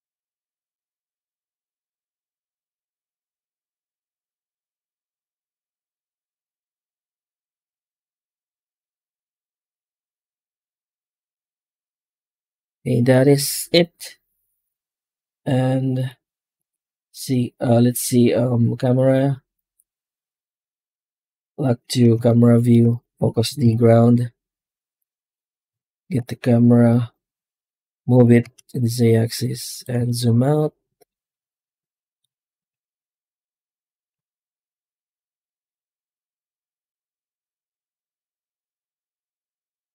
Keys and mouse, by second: 2.1-7.8 drag, 10.7 z, 11.8-12.9 ctrl+middle drag, 13.6 n, 18.7-19.7 drag, 39.8 F12.